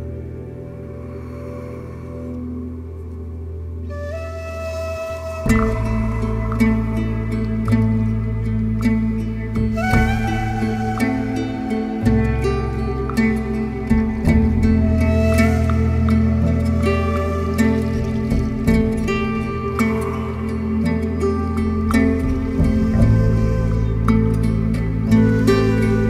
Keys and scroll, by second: 1.3 b, 1.4 o, 1.6 y, 1.7 Return, 7.5 3, 13.4 4, 18.5 4, 18.7 Return, 20.9 3.